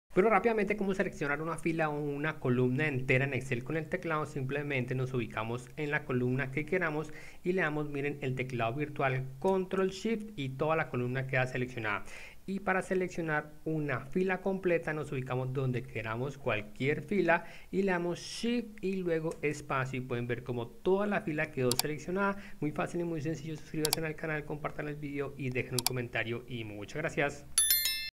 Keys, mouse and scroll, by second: 5.8 click, 9.5 ctrl+space, 12.0 Escape, 12.8 click, 15.8 click, 19.4 shift+space.